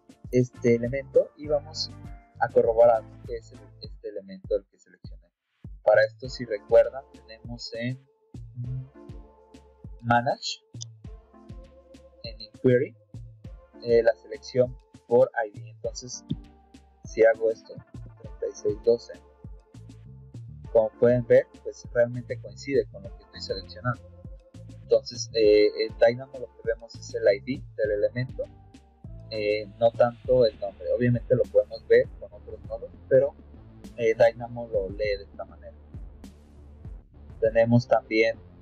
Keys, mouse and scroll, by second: 20.6 click, 25.5 middle click, 25.5-26.0 scroll up 2, 26.6 middle click, 26.6 scroll up 2, 29.2 click, 30.0 middle click, 32.3 middle click, 32.8 middle click, 35.9 click, 36.3 click.